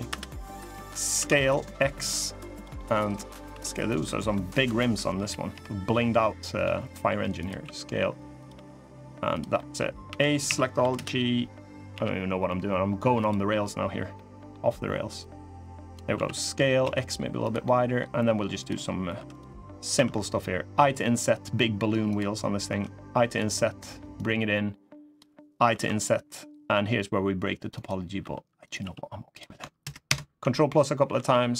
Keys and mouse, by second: 0.9 s, 2.5 middle click, 3.2 s, 4.9 KP_1, 5.2 KP_3, 6.4 g, 7.4 s, 8.3 g, 9.3 click, 9.8 a, 10.2 s, 11.6 g, 13.9 click, 13.9 middle click, 15.0 click, 15.9 s, 17.4 middle click, 18.3 click, 18.9 3, 19.7 i, 22.4 i, 23.9-24.9 drag, 25.4 i, 27.9 e, 28.5 s, 29.5 ctrl+KP_Add, 30.1 ctrl+KP_Add, 30.8 g.